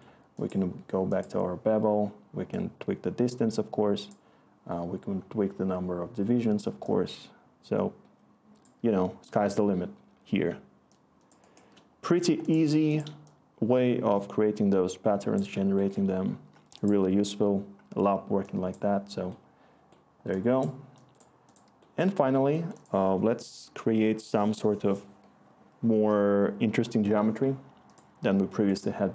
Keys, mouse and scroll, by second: 17.1 typing.